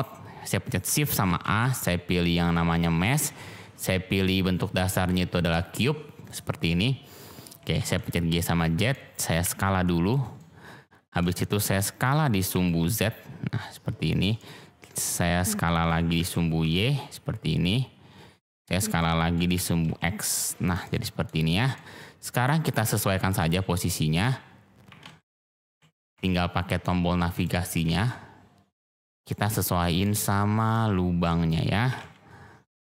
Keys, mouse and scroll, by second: 1.4 shift+a, 7.4 g, 7.7 z, 8.4 click, 8.9 middle click, 9.4 s, 10.1 click, 10.3-11.1 drag, 11.3-11.6 shift+drag, 11.7 middle click, 12.7 z, 14.0 drag, 14.3-15.1 drag, 16.1 s, 16.6 y, 18.7 click, 19.0-19.3 drag, 19.5 s, 19.8 x, 20.6 click, 20.8-21.2 drag, 21.7-22.6 drag, 22.9 drag, 23.5-24.1 shift+drag, 24.8 g, 25.0 z, 25.4 click, 25.6 g, 26.1 y, 27.3 click, 27.7 g, 27.8 x, 29.1 click, 29.3-29.9 middle drag, 29.9 click, 30.0 middle click, 30.2 shift+middle click, 31.8 g, 31.9 z, 32.8 click.